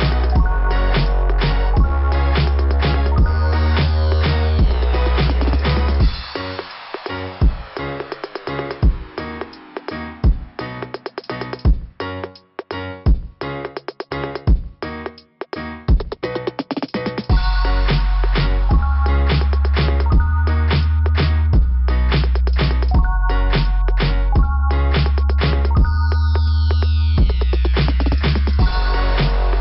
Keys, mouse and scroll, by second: 4.5 scroll up 2, 14.6 scroll down 2, 19.1 click, 23.7 click, 25.6-26.1 scroll up 2, 29.0-29.6 scroll up 2.